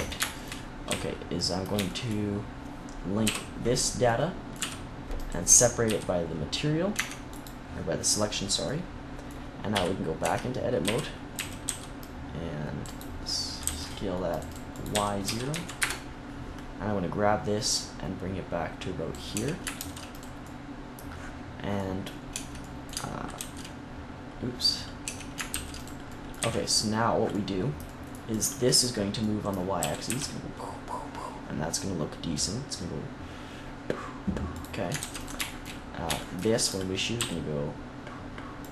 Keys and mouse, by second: 0.8 z, 3.1 l, 4.5 p, 5.7 z, 6.8 Tab, 9.6 KP_3, 10.1 Tab, 10.7 z, 11.2 a, 11.6 c, 13.5 c, 14.8 s, 16.3 click, 17.6-19.0 drag, 19.2 Tab, 19.7 ctrl+s, 21.7 middle click, 22.2 Tab, 23.3 ctrl+z, 24.9 Tab, 25.4 ctrl+s, 26.3 z, 29.8 g, 34.5 middle click, 34.9 ctrl+s, 37.1 r.